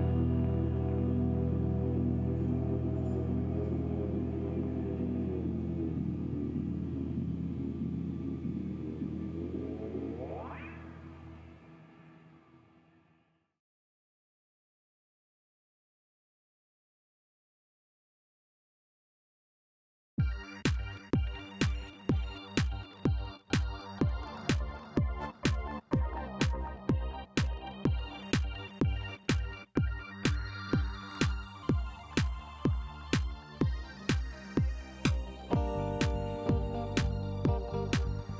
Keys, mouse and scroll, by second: 0.6 shift+right click, 1.9 click, 2.6 click, 3.2 shift+right click, 5.9 shift+middle click, 6.2 shift+right click, 7.1-7.5 shift+scroll up 2, 8.1 scroll down 1, 9.7 click, 9.9 space, 12.7 click, 13.2 shift+right click, 15.4 ctrl+click, 16.0 ctrl+shift+right click, 18.6 click, 20.4 scroll up 1, 21.7 click, 22.8 shift+right click, 23.7 shift+scroll down 1, 24.0 shift+middle click, 24.5 shift+right click, 25.5 shift+right click, 27.3 click, 27.4 space, 28.7 middle click, 29.3 shift+right click, 29.9 shift+middle click, 30.4 scroll down 2, 31.7 click, 33.4 click, 34.9 click, 35.8 middle click, 36.7 click, 37.8 click.